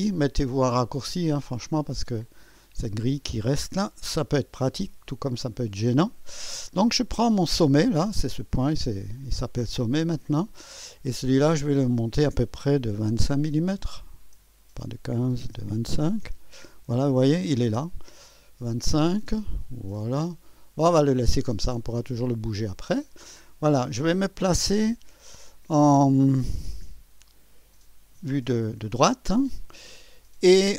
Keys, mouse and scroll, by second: 2.2 click, 3.7 2, 3.7 KP_2, 4.5 scroll up 1, 5.5 right click, 7.1 typing, 7.6 click, 9.1 click, 9.7 click, 11.5 click, 12.9 1, 15.4-16.7 typing, 21.6 click, 22.5 click, 23.8 click, 24.6 6, 26.5 3.